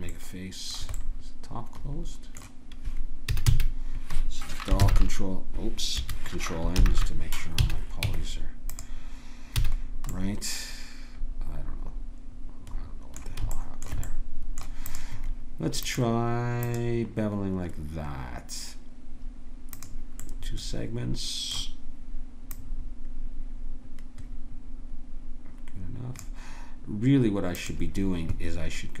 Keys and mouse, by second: 3.3 a, 3.5 a, 4.8 ctrl+j, 4.8 ctrl+h, 6.7 ctrl+n, 7.6 a, 8.0 Tab, 9.6 a, 13.5 middle click, 14.9-20.2 drag, 21.4-25.2 drag, 27.6-29.0 drag.